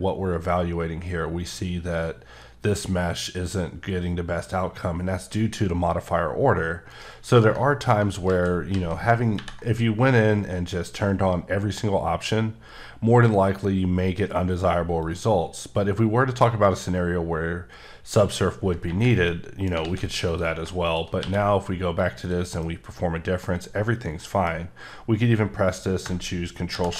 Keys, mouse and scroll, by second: 5.4-5.9 scroll down 2, 6.9 right click, 8.3 ctrl+z, 8.7 ctrl+z, 15.0 click, 19.3 middle click, 19.8 a, 20.3 click, 21.2 q, 22.0 click, 22.6 middle click, 26.7 ctrl+shift+b.